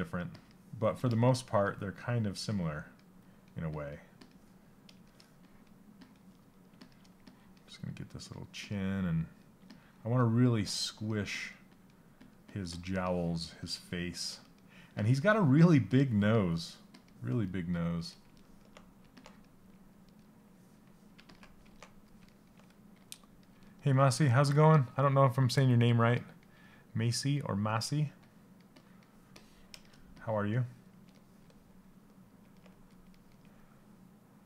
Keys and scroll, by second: 9.2 s.